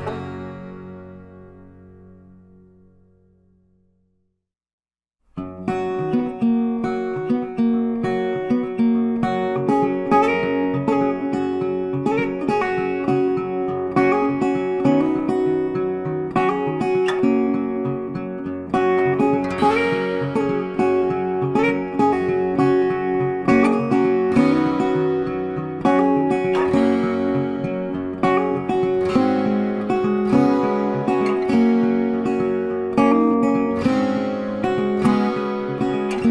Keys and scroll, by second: 19.1 ctrl+t.